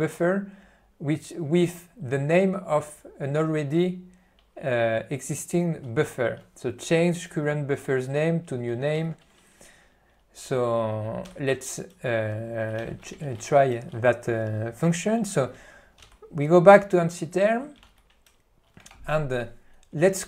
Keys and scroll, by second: 9.0 ctrl+g, 11.3 Left, 12.9 ctrl+n, 13.4 alt+w, 16.2 Left, 17.5 alt+:, 19.6 ctrl+y.